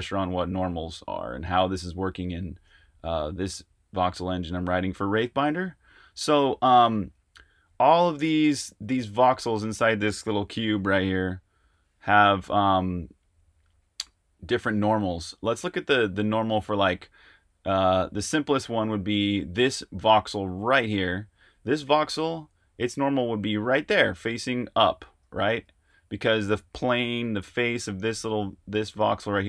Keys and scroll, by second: 10.5 w, 10.7 w, 10.9 w, 11.1-13.6 w, 25.6 super+z.